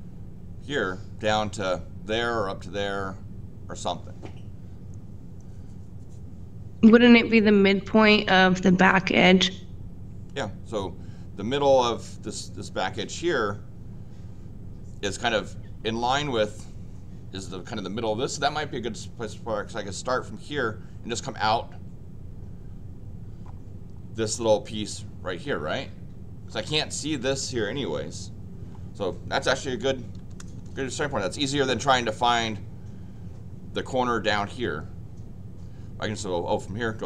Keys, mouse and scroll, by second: 30.1 l, 31.6 Escape, 31.7 Escape.